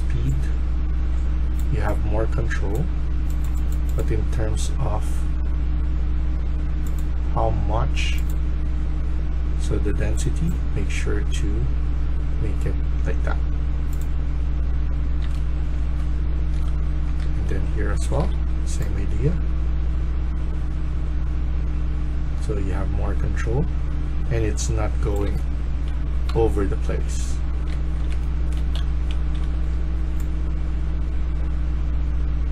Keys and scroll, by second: 1.0-1.8 typing, 14.7-15.7 typing, 16.7-18.3 typing, 24.9-29.8 typing.